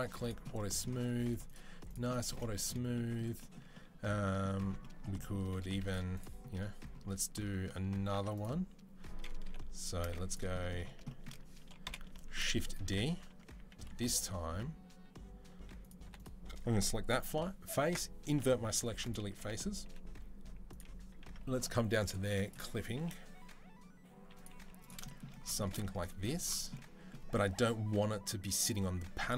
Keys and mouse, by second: 1.2-6.8 drag, 5.7-6.8 middle drag, 5.7-10.7 right drag, 6.8 Tab, 7.9 Tab, 9.2 KP_7, 9.8 z, 11.6 KP_7, 12.1 shift+d, 12.6 Tab, 12.6-15.6 middle drag, 13.3 a, 15.6 click, 15.7 middle click, 15.8 3, 15.9 click, 16.4-22.2 middle drag, 17.1 ctrl+i, 18.1 Delete, 19.1 a, 19.6 g, 22.2 click, 22.6-29.3 middle drag, 22.7 g, 24.3 z.